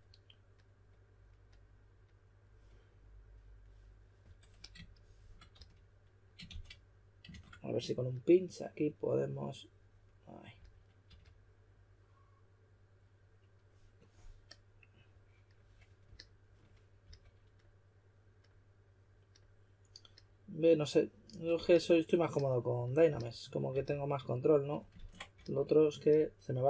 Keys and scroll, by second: 5.5 shift+s, 10.5-11.5 typing, 17.0 s, 21.3-22.0 typing, 23.0-23.7 typing, 24.9 super+z, 25.3 s.